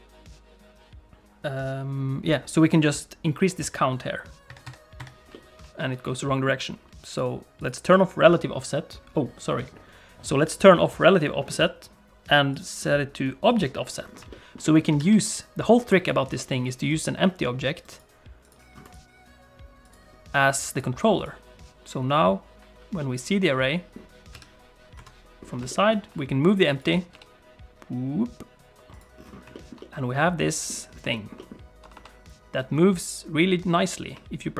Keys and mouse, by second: 4.4 shift+click, 5.3 middle click, 6.2 middle click, 7.1 click, 7.6 click, 12.6 click, 13.5 click, 14.3 shift+middle click, 14.6 middle click, 15.0 shift+a, 17.7 right click, 23.0 middle click, 24.3 KP_3, 24.9 KP_1, 25.7 shift+middle click, 26.5 click, 26.8 click, 27.1 g, 29.5 shift+middle click, 29.8 middle click, 31.1 shift+middle click, 31.3 middle click, 31.8 r.